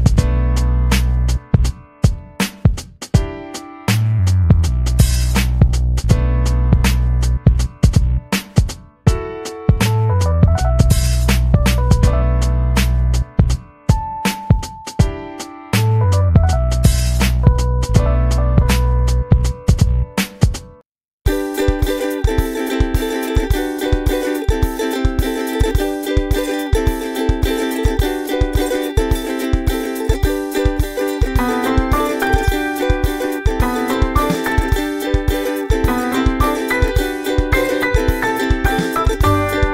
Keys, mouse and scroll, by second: 0.8 ctrl+click, 2.4-3.4 drag, 4.2 click, 4.8 click, 5.6 click, 6.8 click, 7.2-9.2 drag, 9.6-10.8 drag, 11.6 click, 11.9 click, 12.7 click, 14.0 click, 14.8 click, 15.2-17.6 drag, 17.9 click, 19.1 ctrl+scroll down 2, 20.2 click, 20.5-21.6 drag, 21.8 click, 22.8 click, 23.2 click, 24.2 click, 24.5 click, 25.8 click, 26.8 click, 27.6 click, 28.5 click, 28.8-31.6 drag, 32.0-33.3 drag, 33.4 ctrl+scroll up 2, 34.0 middle click, 34.2 middle click, 36.8-37.3 ctrl+scroll down 4, 38.8 ctrl+s.